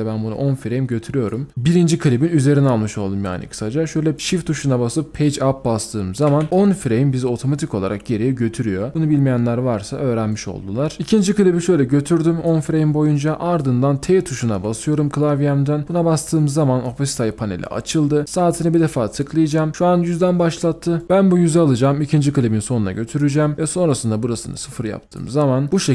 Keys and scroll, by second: 6.3 shift+Page_Up, 15.8 t.